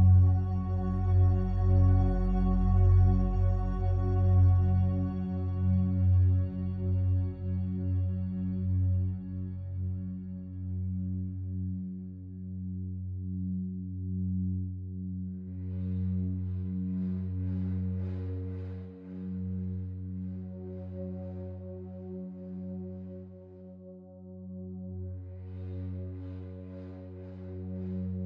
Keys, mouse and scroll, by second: 0.3-2.4 drag, 2.4 ctrl+z, 5.0 Tab, 7.3 a, 7.5 a, 8.9 right click, 9.9 shift+a, 11.6 click, 13.4 s, 16.9 click, 17.7 s, 18.0 z, 22.7-27.9 drag, 27.9 alt+click.